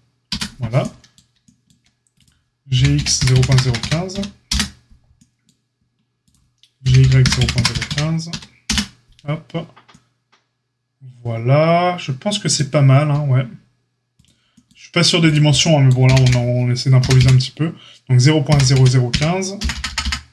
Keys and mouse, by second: 2.7 g, 6.8 g, 14.2-15.2 drag, 16.0 g.